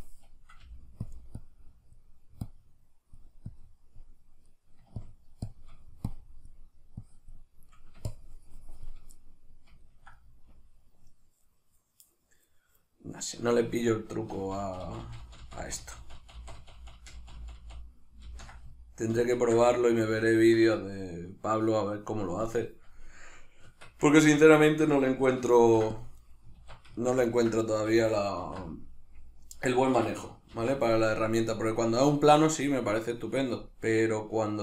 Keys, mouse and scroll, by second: 0.6 f, 4.5 middle click, 5.0-7.7 shift+drag, 7.7 middle click, 8.1-9.1 shift+drag, 9.1-22.4 middle drag, 14.4 ctrl+z, 19.4 ctrl+z, 22.4-24.2 drag, 23.7 Tab, 24.2-25.6 ctrl+middle drag, 25.6 ctrl+r, 26.4 right click, 26.6 alt+q, 27.0 shift+middle click, 27.8 a, 28.4 alt+e, 29.9 Escape, 30.6 ctrl+e.